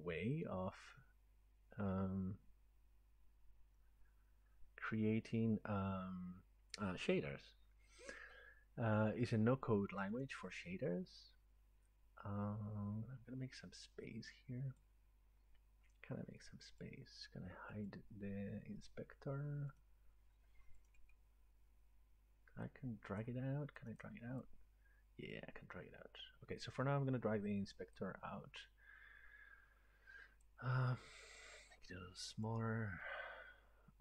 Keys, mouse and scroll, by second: 10.1 click, 14.8 click, 16.8 click, 17.9 click, 22.9 right click, 23.2 click, 24.5 click, 26.6 click, 30.4 click, 32.4 click.